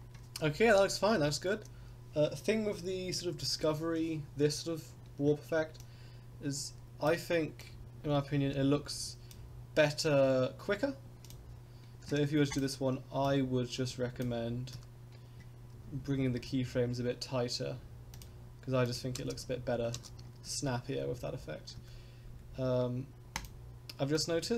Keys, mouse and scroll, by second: 5.8-7.0 drag, 7.6-9.3 drag, 11.2 click, 12.5 click, 13.3 click, 14.7 a, 15.7 s, 18.9 click, 19.1 space, 20.0 space, 21.2 ctrl+z, 22.5 ctrl+z, 23.4 click, 24.2-24.5 drag.